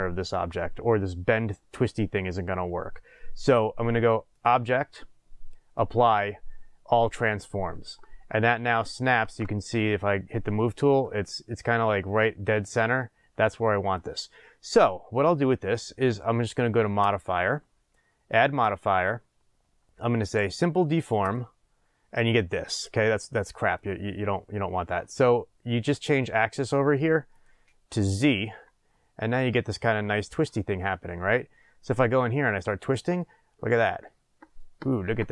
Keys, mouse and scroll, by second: 9.2 shift+space, 11.0-17.0 middle drag, 17.0 click, 18.6-22.8 drag, 22.8-27.3 middle drag, 27.3-35.3 drag.